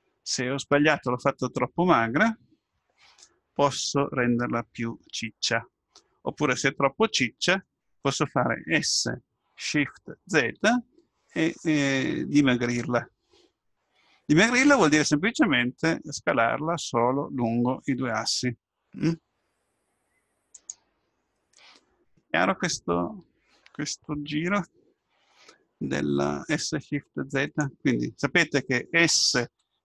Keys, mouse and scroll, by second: 2.1-6.5 middle drag, 8.8 s.